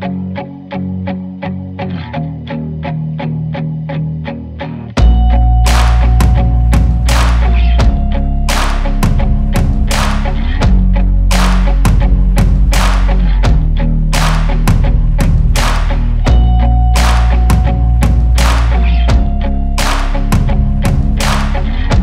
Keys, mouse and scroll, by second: 0.9 click, 1.4-2.7 drag, 1.5-3.5 typing, 2.2 Tab, 3.3 Tab, 4.0 click, 4.2 Tab, 4.6 click, 5.7 Tab, 6.1 g, 6.3 click, 6.6 Tab, 6.9 alt+a, 7.1 click, 7.1 shift+d, 7.3 g, 7.5 Tab, 7.6 z, 7.9-9.0 drag, 9.0 Tab, 9.3 g, 9.4 g, 10.4 Tab, 10.6 alt+a, 10.8 click, 11.4 scroll down 4, 11.8 scroll up 2, 12.1 click, 12.8 click, 13.2 /, 13.3 scroll, 13.4 g, 13.7 Tab, 13.9 Left, 15.4 click, 15.5 ctrl+a, 16.1 shift+right click, 16.2 shift+s, 17.5 alt+a, 17.7 click, 18.3 r, 19.1 click, 19.2 ctrl+z, 19.3 click, 20.0 alt+a, 20.8 click, 20.9 shift+right click, 21.1 shift+a, 21.2 s, 21.4 g, 21.5 click, 21.6 alt+a.